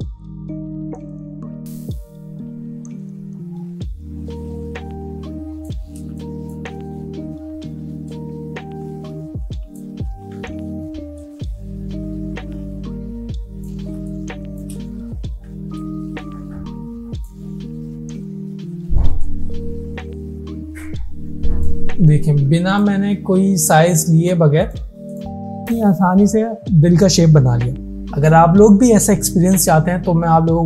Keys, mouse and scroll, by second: 1.6-4.7 drag, 6.2 space, 6.3 click, 6.7 space, 8.1-10.0 drag, 10.1 ctrl+z, 11.2-13.7 drag, 14.0 space, 14.1-14.8 click, 14.5 space, 15.9-17.4 alt+drag, 25.6 alt+scroll down 1, 26.8 space.